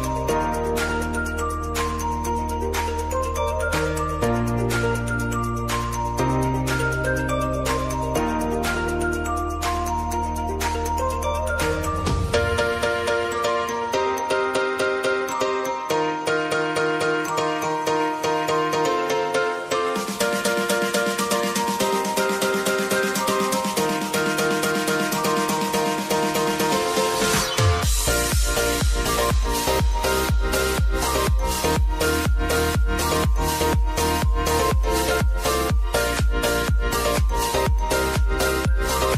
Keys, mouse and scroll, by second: 14.6 space, 16.9-18.7 drag, 18.7 F9, 20.3 click, 21.6 right click, 23.8-28.0 drag, 28.0-30.0 drag, 30.1 space, 32.4-34.9 drag, 35.9-37.7 scroll down 1, 38.1 scroll down 1.